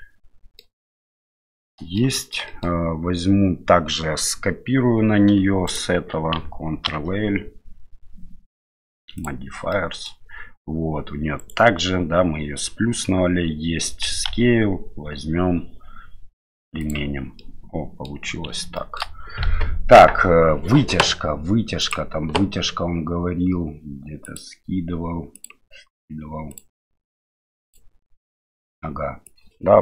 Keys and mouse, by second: 1.2-2.0 middle drag, 2.2 shift+middle click, 2.5 middle click, 5.6 shift+right click, 6.8 ctrl+l, 9.7 middle click, 11.4 right click, 14.2 ctrl+a, 17.5-18.0 middle drag, 18.8 shift+middle drag.